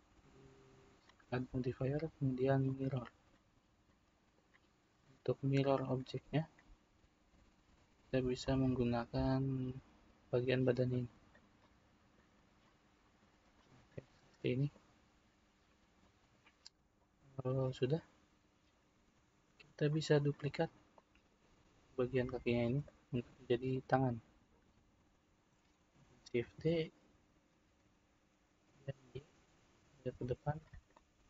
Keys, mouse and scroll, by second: 2.9-3.9 drag, 3.9-5.9 middle drag, 5.9-7.4 drag, 11.6-16.9 middle drag, 16.9 click, 20.9-22.8 middle drag, 22.8 click, 26.4 shift+d, 30.9-31.2 middle drag.